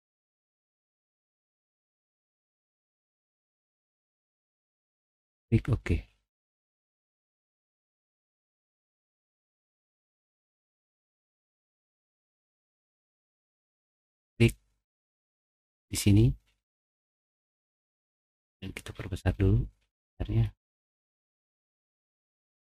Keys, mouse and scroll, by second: 1.0 6, 1.2 Return, 3.4 middle click, 5.1 click, 9.5 middle click, 9.5-10.4 scroll down 3, 13.4 click, 17.1 middle click, 17.1-18.1 scroll up 3, 17.5 middle click, 17.9 middle click, 18.2 middle click, 18.6 middle click, 18.9 middle click, 19.7 middle click, 20.3 middle click, 20.8 middle click, 21.2 middle click, 21.5 middle click, 22.0 middle click.